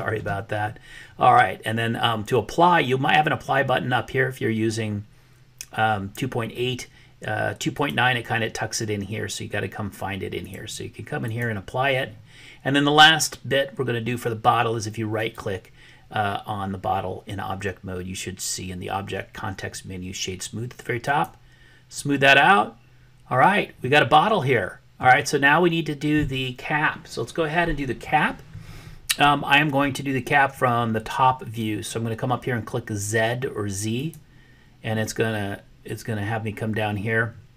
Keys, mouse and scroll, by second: 7.7-9.7 drag, 10.3-11.5 drag, 15.3-21.4 right drag, 23.9-25.1 middle drag.